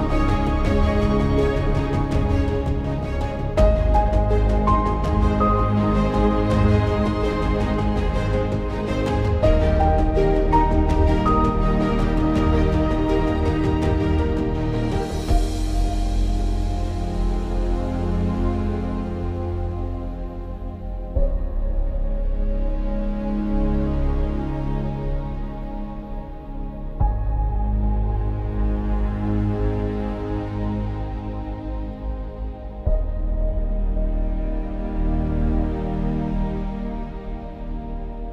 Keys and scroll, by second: 17.0 ctrl+=, 17.2 ctrl+=, 31.2 ctrl+i, 36.0-36.7 [, 36.9 [.